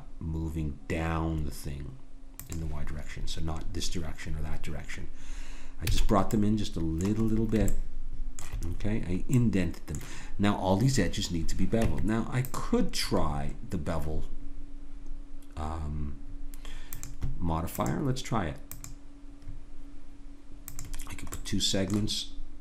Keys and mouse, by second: 5.9 a, 6.3-9.1 middle drag, 11.8 Tab, 16.9-22.6 drag.